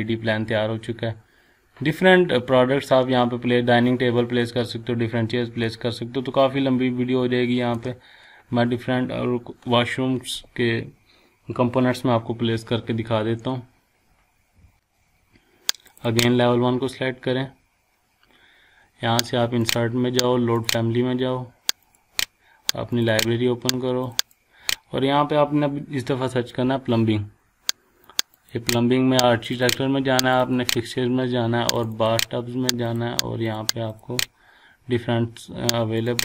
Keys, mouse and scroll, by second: 5.6 shift+middle click, 5.7-7.8 shift+middle drag, 7.7-9.2 shift+scroll up 2, 9.2-9.8 scroll up 1, 15.9 click, 19.6 click, 26.6 p, 28.1 click.